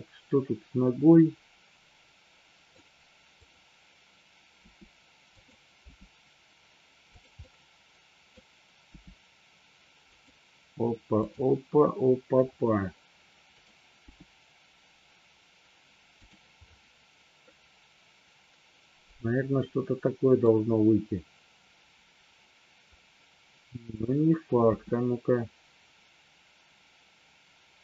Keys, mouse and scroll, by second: 3.4 click, 4.5 r, 5.3 click, 5.8 g, 7.0 click, 7.4-8.3 middle drag, 8.9 g, 10.0 click, 11.2 click, 13.5 click, 14.4 g, 17.4 scroll up 1, 17.7-20.4 middle drag, 24.8 r.